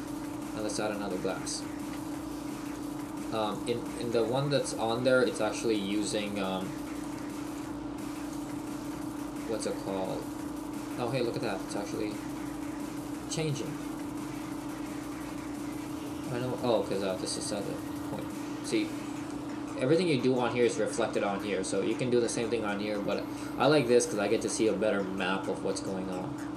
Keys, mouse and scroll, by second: 1.3-2.0 scroll down 2, 3.0 click, 4.2 click, 18.4 click.